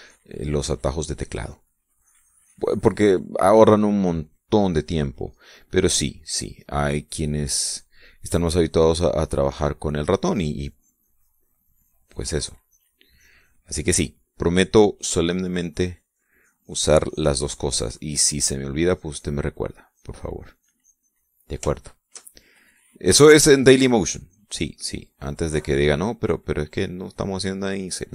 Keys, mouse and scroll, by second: 2.8-4.0 drag, 4.6-6.3 drag, 6.7-7.8 drag, 11.0-13.3 drag, 13.4-15.0 drag, 16.7-19.0 drag, 19.6-22.2 drag, 22.5 shift+middle click, 24.2-25.6 drag, 27.2-28.1 drag.